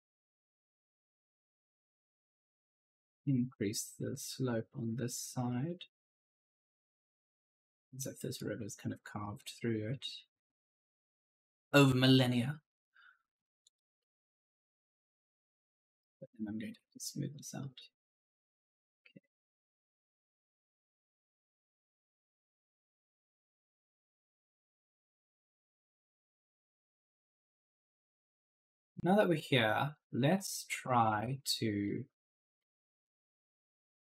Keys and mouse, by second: 0.5 click, 8.0 right click, 9.3 click, 13.6 right click, 14.2 click, 15.8 right click, 16.1-17.2 typing, 16.4 right click, 17.5 click, 19.5 click, 22.6-25.1 typing, 22.7 right click, 23.8 click, 24.1 right click, 25.5 click, 28.6 right click, 28.7-34.1 typing.